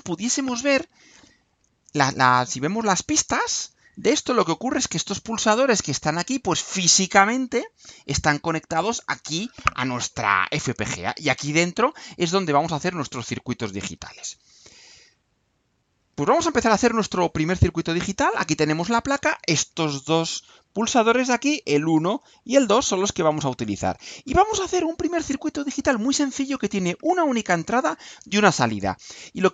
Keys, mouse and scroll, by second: 16.0 click.